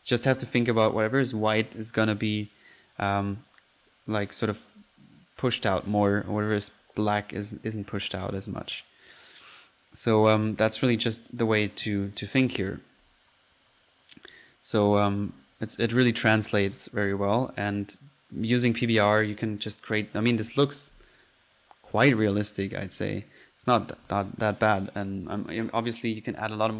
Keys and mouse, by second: 0.1 click, 4.3 click, 7.5 click, 8.0 click, 8.5 click, 10.2 click, 12.3 middle click, 13.3 middle click, 14.3 middle click, 14.3-14.9 drag, 17.7-18.0 drag, 18.6 click, 20.8 click, 20.9 F1, 21.9 click, 22.7 Escape, 23.4 click, 24.7 click, 24.9 click.